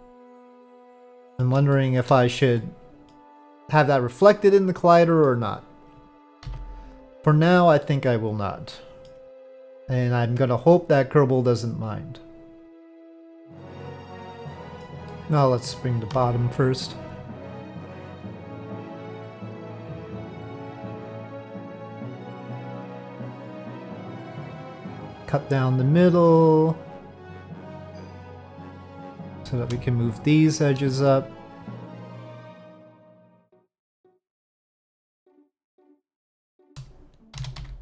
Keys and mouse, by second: 1.7 shift+middle drag, 2.6-3.1 middle drag, 4.2-5.3 middle drag, 6.4 KP_Divide, 7.8-9.1 middle drag, 10.9-13.6 drag, 13.6-14.8 middle drag, 15.1 middle click, 16.1 3, 16.3 click, 17.4-19.7 drag, 19.9-21.6 middle drag, 23.8 click, 24.9 click, 29.2 1, 31.7-33.4 drag, 33.9 middle click, 36.3 shift+middle click, 37.4 s.